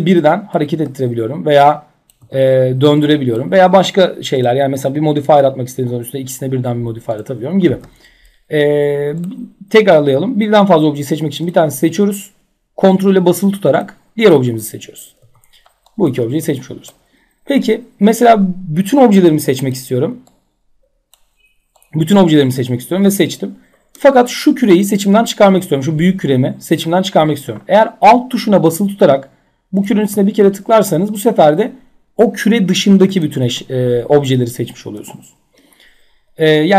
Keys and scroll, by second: 0.7 ctrl+z, 2.2 e, 7.2 ctrl+z, 14.7 w, 16.3 ctrl+z, 32.9 ctrl+z.